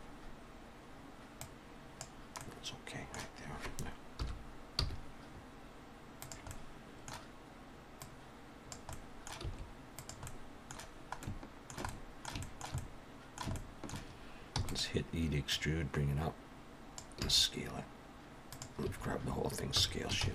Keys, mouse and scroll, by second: 1.4 click, 2.4 middle click, 4.1 KP_1, 4.8 g, 6.5 middle click, 8.0 click, 8.9 middle click, 9.4 s, 10.3 middle click, 11.2 middle click, 11.9 shift+middle click, 12.8 middle click, 13.6 shift+middle click, 14.6 e, 15.5 click, 17.2 s, 18.8 a, 19.8 s.